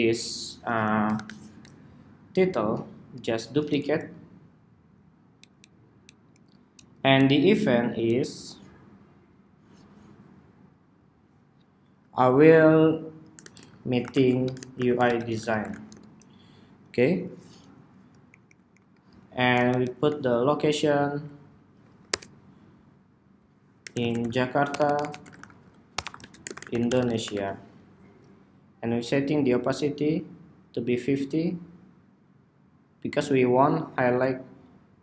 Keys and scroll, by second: 0.2 super+=, 2.5 super+d, 6.2 alt+Down, 6.7 alt+Down, 7.1 alt+Down, 15.9 ↺, 18.3 super+d, 26.8 ⟲.